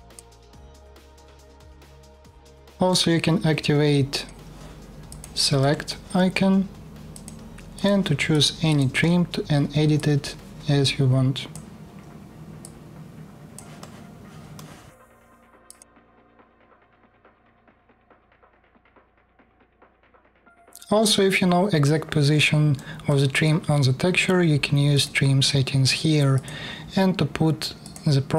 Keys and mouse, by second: 0.5-3.9 middle drag, 3.9-4.8 drag, 4.8 middle click, 4.9-6.8 drag, 6.8 middle click, 7.0 click, 7.4 middle click, 7.6 click, 8.0 middle click, 8.5 click, 9.6-15.5 middle drag, 16.4 middle click, 26.1-27.5 drag, 27.9-28.3 middle drag.